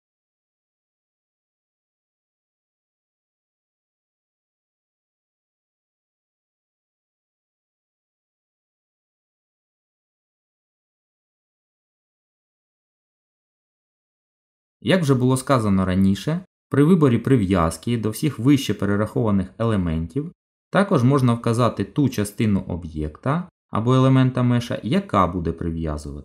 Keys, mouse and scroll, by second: 5.6 ctrl+z, 7.2 ctrl+z, 7.8 middle click, 11.4 Delete, 12.4 middle click.